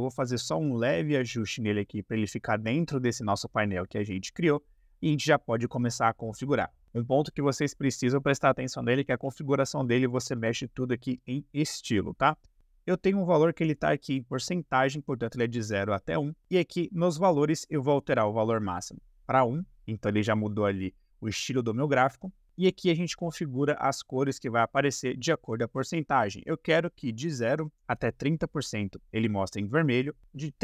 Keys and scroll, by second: 18.9 BackSpace, 27.2-30.6 typing.